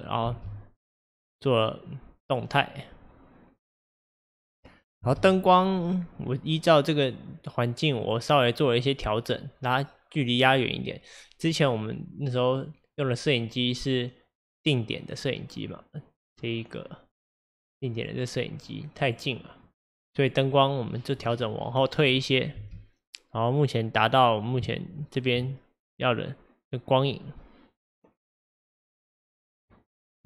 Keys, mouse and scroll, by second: 0.3 space, 5.1 space, 5.7 click, 8.1 click, 17.4 click, 18.0 click, 19.1 click, 19.7 click, 22.6 space, 24.2-24.8 scroll up 1, 24.8-27.8 shift+middle drag.